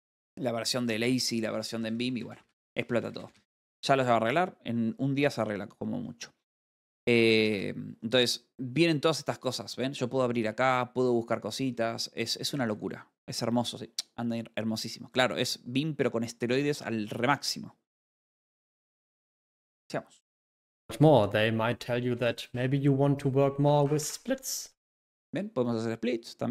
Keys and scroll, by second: 1.0-1.8 typing, 7.8 space, 12.3 Escape.